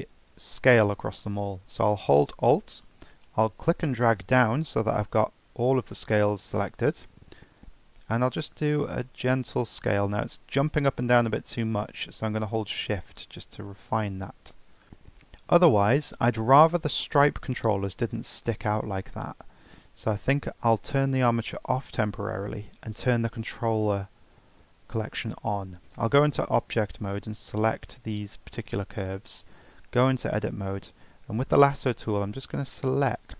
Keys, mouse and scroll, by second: 3.6-6.7 alt+drag, 14.8-15.4 shift+middle drag, 15.4-16.0 scroll up 1, 16.0 click, 16.6 scroll down 2, 17.0 scroll up 1, 21.5 click, 23.2 click, 24.5 click, 25.9-27.8 drag, 29.7 Tab, 31.7 click, 33.2 shift+click.